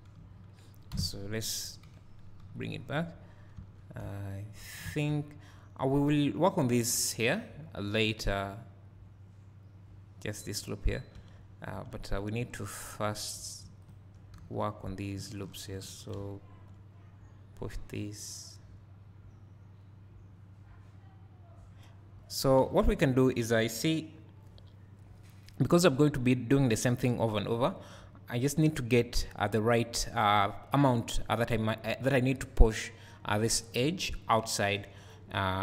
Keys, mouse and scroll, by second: 0.9 KP_Divide, 2.0 KP_1, 2.4 KP_3, 2.5-13.2 drag, 3.6 Tab, 4.0 1, 11.2 Tab, 12.2 2, 14.4 f, 16.2 `, 18.0-35.6 drag, 22.9 ctrl+z, 23.5 z.